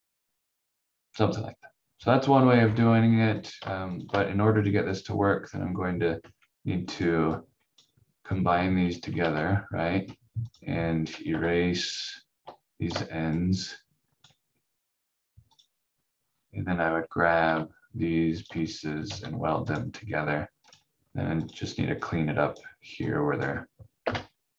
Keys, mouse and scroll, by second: 2.2 scroll up 1, 3.4 click, 5.4 scroll up 1, 6.1 v, 6.9 click, 9.1 ctrl+z, 10.4 click, 11.8 shift+click, 16.1 scroll down 1, 18.3 shift+click, 19.1 w, 19.7 click, 24.0 Delete.